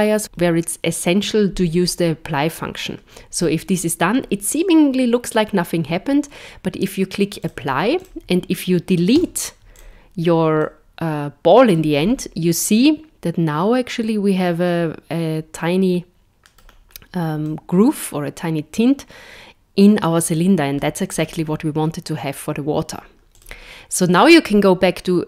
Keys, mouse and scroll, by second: 7.4 click, 7.9 click, 9.1 x, 10.6 middle click, 12.0 scroll up 6, 12.7 middle click, 16.7-17.4 scroll down 2, 17.4 middle click, 21.2-23.3 scroll down 3, 23.3 click, 24.2 right click.